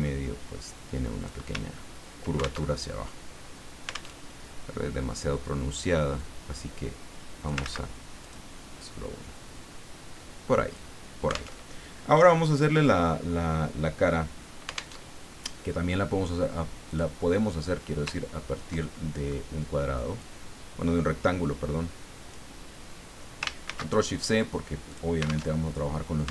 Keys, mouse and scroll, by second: 1.6-2.0 ctrl+scroll down 2, 2.7 ctrl+alt+Tab, 4.2 alt+Tab, 6.2-7.6 drag, 7.6 ctrl+z, 8.2 ctrl+click, 8.8-10.9 drag, 11.5 alt+Tab, 15.0 alt+Tab, 16.9 click, 18.2-18.7 ctrl+scroll down 2, 18.8 ctrl+click, 20.2-22.6 drag, 23.6 ctrl+shift+c, 24.9 click, 25.6 alt+Tab.